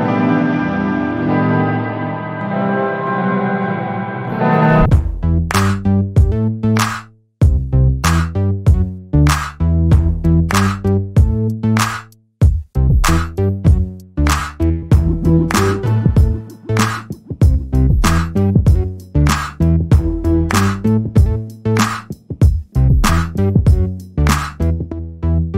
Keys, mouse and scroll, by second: 2.9 alt+middle click, 3.5 click, 9.0 alt+middle click, 10.2 click, 14.2 double click, 14.9 middle click, 15.6 alt+click, 16.7 n, 16.8 b, 17.7 alt+click, 18.5 alt+middle click, 18.8 alt+click, 19.9 alt+middle click, 20.5 click, 21.0 ctrl+a, 21.6 alt+click, 22.4 right click, 24.2 click.